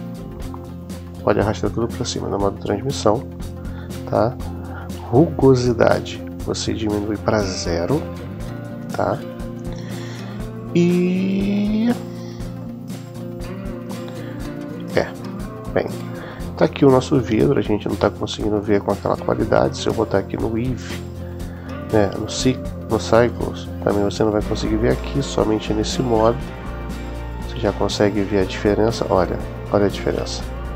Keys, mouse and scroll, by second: 0.7-2.1 drag, 6.3-7.9 drag, 19.2 click, 20.4-22.4 drag, 24.7 click, 26.1-27.3 middle drag.